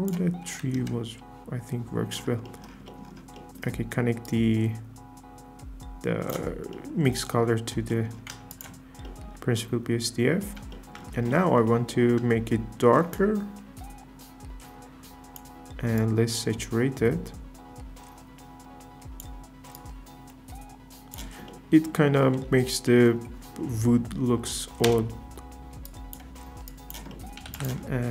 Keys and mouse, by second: 3.3 middle click, 4.2 drag, 6.7-8.0 drag, 8.5 ctrl+shift+click, 13.1-15.4 shift+drag, 16.1-19.3 shift+drag, 19.8-21.2 shift+drag, 24.8 KP_0, 25.9 click, 27.5 shift+a.